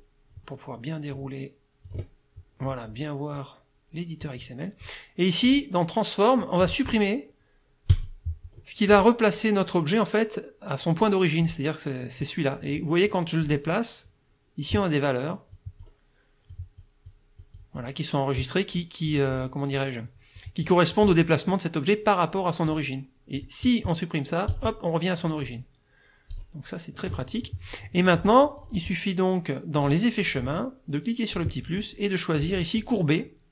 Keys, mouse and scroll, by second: 1.9 click, 4.2 click, 5.5 click, 7.9 click, 8.6 click, 11.5 click, 12.2-13.3 drag, 15.5 click, 16.5 click, 17.1 click, 19.1 click, 20.4 click, 21.5-22.9 drag, 23.4 click, 24.5 click, 26.3 click, 28.6 click, 29.8 click, 31.3 click, 32.4 click.